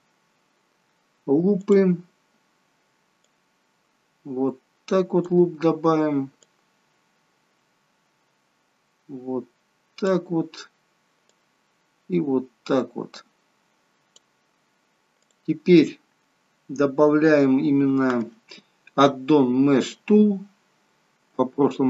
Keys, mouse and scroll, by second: 1.7 click, 3.2 click, 6.4 click, 11.3 click, 15.2 click, 17.0 scroll up 1, 17.5 scroll down 1, 21.2 m.